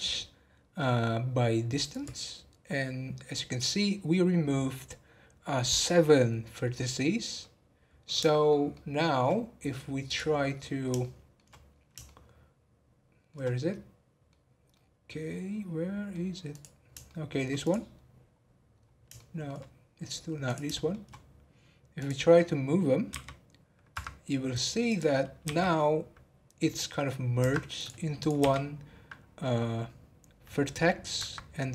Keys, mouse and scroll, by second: 6.8 scroll down 2, 7.4-9.4 middle drag, 9.4-10.0 scroll down 2, 10.0 click, 10.4-11.7 middle drag, 11.7-12.0 scroll down 1, 12.0-16.5 shift+middle drag, 16.5 click, 17.0 shift+middle click, 17.6 click, 18.0-18.3 scroll down 4, 18.7 scroll up 2, 19.1 shift+middle click, 19.7 scroll up 1, 20.4 click, 20.7 shift+middle click, 21.1-22.0 scroll up 1, 22.0 click, 24.5 click, 25.4 g, 27.7 click, 28.1 click, 31.6-31.7 scroll down 3.